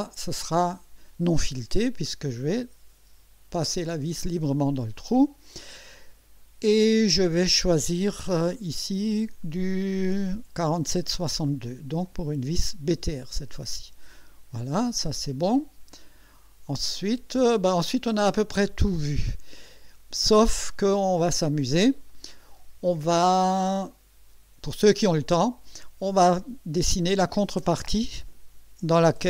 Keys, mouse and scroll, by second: 8.5 click, 11.0 click, 12.0-14.1 drag, 16.9 click, 18.2-19.5 drag, 23.2-25.7 drag, 27.0-29.2 drag.